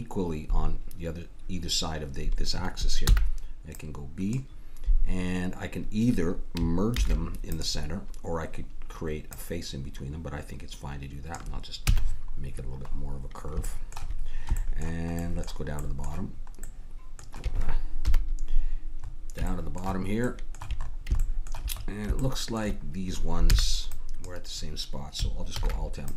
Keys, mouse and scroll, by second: 3.0 b, 6.9 alt+m, 9.3-11.3 drag, 11.9 a, 12.0-13.7 middle drag, 17.9 KP_1, 19.2 middle click, 23.4 b, 25.6 alt+m.